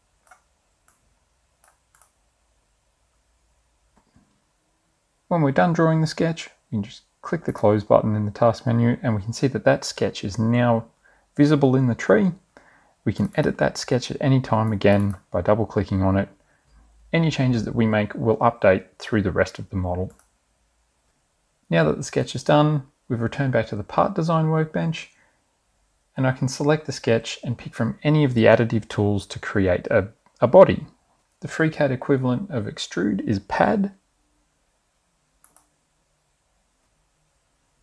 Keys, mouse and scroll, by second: 0.0 click, 1.1-2.5 drag, 7.5 click, 13.3 click, 14.8 click, 20.2 click, 31.2 middle click, 35.5 click.